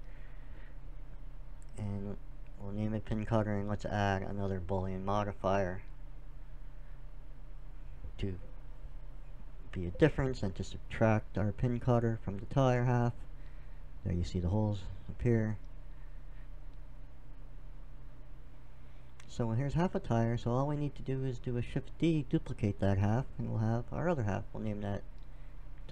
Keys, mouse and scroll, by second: 2.3 middle click, 4.0 middle click, 6.0 right click, 6.8 click, 7.9-9.1 drag, 10.1-12.0 drag, 12.1-13.9 drag, 14.1 middle click, 15.8-17.0 middle drag, 17.0-19.4 drag, 19.4 middle click, 19.8-21.6 drag, 22.2 shift+d, 23.0-25.8 drag.